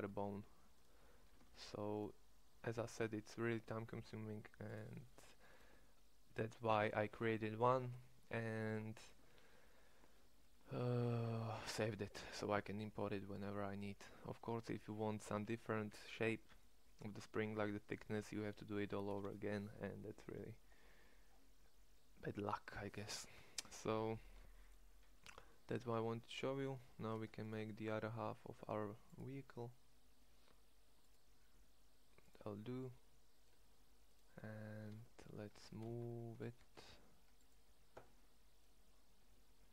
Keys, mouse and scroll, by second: 1.4 ctrl+Tab, 17.1-17.5 middle drag, 23.8 Tab, 27.1 Tab, 34.8 ctrl+Tab, 35.5 g, 39.1 g.